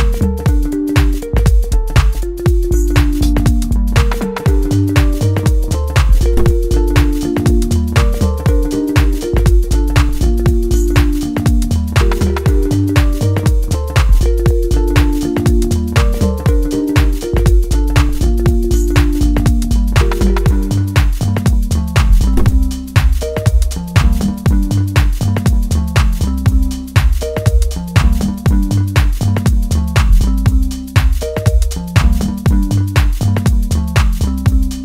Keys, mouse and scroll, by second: 2.2-5.4 drag, 5.4 middle click, 7.0-10.1 drag, 10.1-12.9 middle drag, 12.9 click, 15.0 middle click, 16.2-16.8 scroll up 1, 17.7 shift+middle click, 18.7-20.5 scroll up 1, 23.7-29.5 drag, 29.5-32.1 middle drag, 32.1-34.7 drag, 34.7-34.8 middle drag.